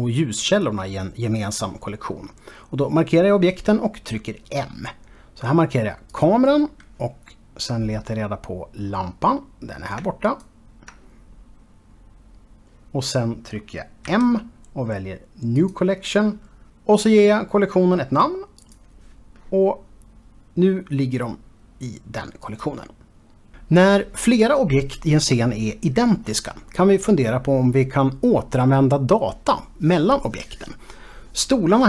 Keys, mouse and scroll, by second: 6.1 click, 7.5 scroll down 2, 8.1-9.9 scroll down 2, 10.3 ctrl+click, 11.9-13.9 scroll up 2, 14.1 m, 15.6 click, 16.9-18.9 typing, 19.6 Return, 19.8 click, 20.6 scroll down 1, 22.4 click.